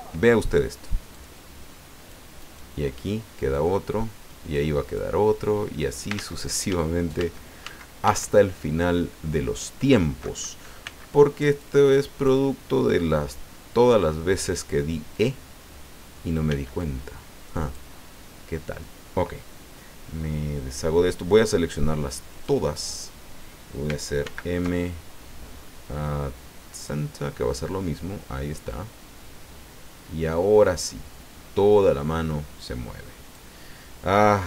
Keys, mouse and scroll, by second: 1.1-2.3 drag, 2.5 right click, 3.5-4.8 drag, 4.8 right click, 6.1 ctrl+z, 10.8 b, 11.6 click, 15.1 click, 16.5 b, 16.8-17.9 drag, 22.3 click, 24.2 alt+m, 26.8 click, 28.7-33.5 drag.